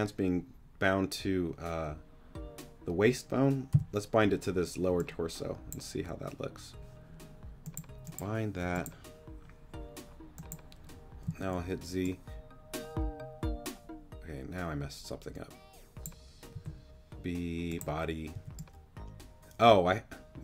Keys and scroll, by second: 3.7 g, 11.2 z, 16.5 b, 18.3 g.